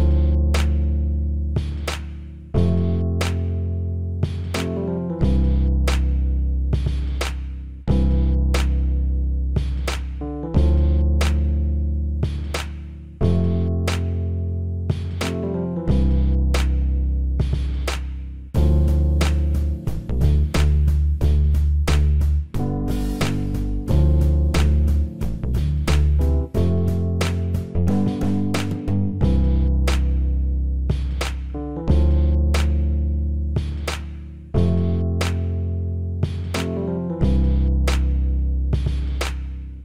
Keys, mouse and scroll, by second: 0.2 s, 1.8-4.1 middle drag, 6.1-8.0 right drag, 8.0 KP_1, 9.1 Tab, 11.1 a, 11.7-13.3 middle drag, 13.3 KP_3, 14.5 ctrl+KP_3, 16.7-17.9 drag, 18.1 click, 18.1 c, 20.2 right click, 20.6 middle click, 20.7 click, 20.8-22.4 middle drag, 24.4 KP_1, 25.3 middle click, 28.3-31.2 drag, 32.2-33.7 middle drag, 34.4-36.4 drag, 34.8 right click.